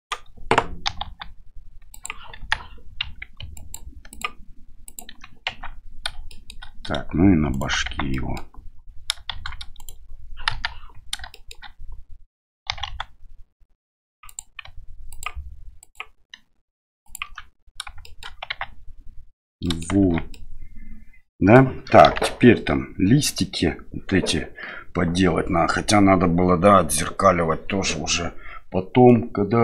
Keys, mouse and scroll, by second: 0.0 right click, 0.8 e, 2.4 KP_1, 3.6 ctrl+click, 4.1 ctrl+click, 4.8 ctrl+click, 5.5 Tab, 6.3 shift+middle click, 7.5 right click, 7.9 Tab, 8.1 middle click, 9.3 shift+z, 9.8 right click, 10.5 KP_1, 11.3 shift+middle click, 12.7 e, 15.1 ctrl+click, 15.9 ctrl+click, 17.0 ctrl+click, 18.0 shift+middle click, 18.5 Tab, 19.6 middle drag, 20.0 shift+z, 20.3-21.6 middle drag, 22.0 KP_1.